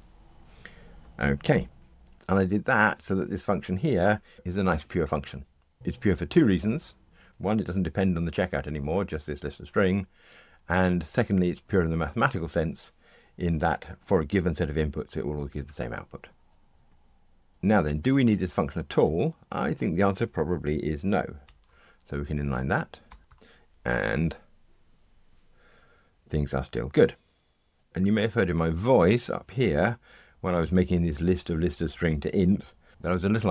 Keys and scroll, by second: 23.2 ctrl+r.